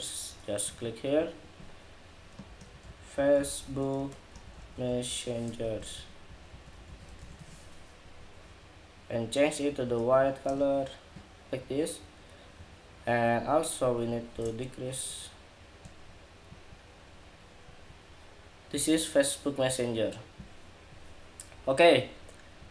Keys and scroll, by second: 7.7 Escape.